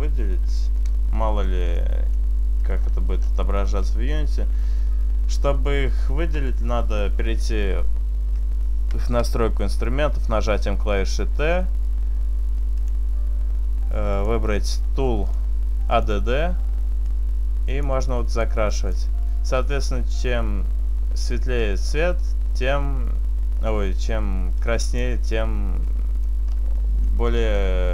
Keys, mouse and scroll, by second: 0.1 middle click, 1.5 middle click, 2.2 shift+middle click, 2.6-3.7 scroll up 5, 6.1 t, 12.8 click, 14.2 click, 15.1 click, 17.2 click, 18.8 click, 21.7 click, 24.7 click, 25.9 middle click, 26.3 scroll up 2, 27.0 middle click, 27.2 middle click.